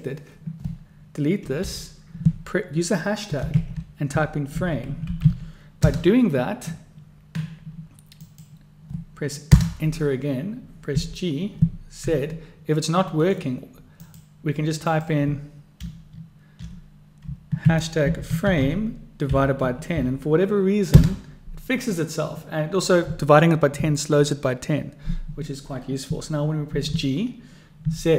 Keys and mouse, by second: 8.4-10.3 drag, 11.0 g, 14.1-22.0 drag.